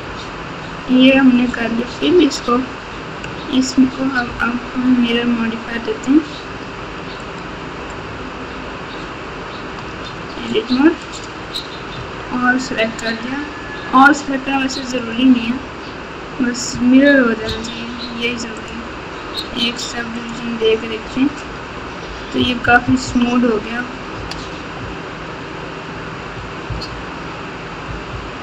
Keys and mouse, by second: 0.0 f, 1.1 Tab, 2.0 Tab, 5.1 Tab, 6.7 Tab, 7.2-8.5 drag, 9.8 Tab, 11.9 a, 13.1-15.1 drag, 18.5-20.3 drag, 22.3 KP_6, 22.6 KP_6, 22.8 KP_6, 23.0 KP_6, 24.1 KP_8, 24.7 KP_8, 26.3-28.4 typing.